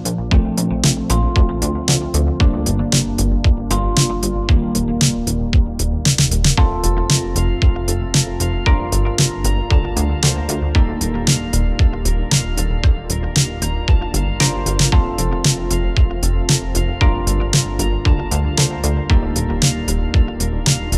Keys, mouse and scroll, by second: 12.4-18.3 space, 18.9 v, 19.4 click, 20.2 scroll down 1.